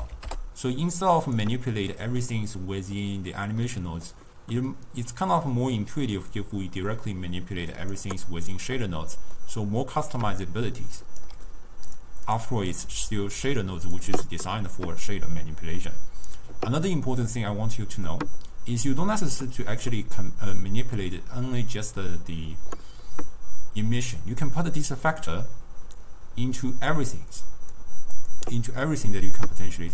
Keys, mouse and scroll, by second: 2.0-4.3 middle drag, 4.3-5.4 scroll down 1, 5.4-8.5 drag, 9.5 middle click, 10.4 d, 10.5 right click, 11.3 d, 12.4 drag, 12.8 click, 13.6 click, 15.5-20.4 middle drag, 24.1 click, 28.3 click.